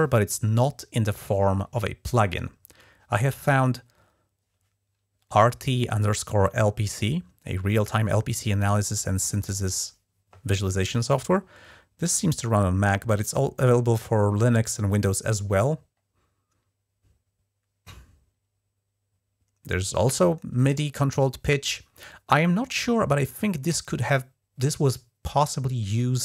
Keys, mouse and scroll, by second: 3.1 click, 8.6 F11.